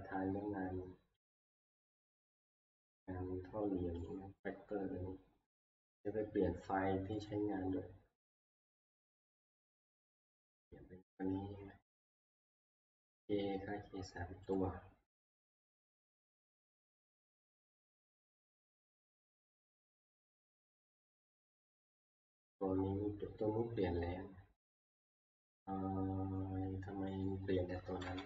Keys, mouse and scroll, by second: 0.2 scroll, 1.4 click, 2.3 click, 2.6 scroll, 4.1 click, 4.4-4.8 scroll, 7.3 click, 10.5 click, 12.8 click, 14.6 click, 15.5 click, 18.0-20.6 drag, 21.2-25.6 scroll down 5, 25.6-26.9 scroll down 1, 26.9 scroll down 1, 27.0 scroll, 27.2 click, 28.1 click, 28.1 ctrl+Page_Down.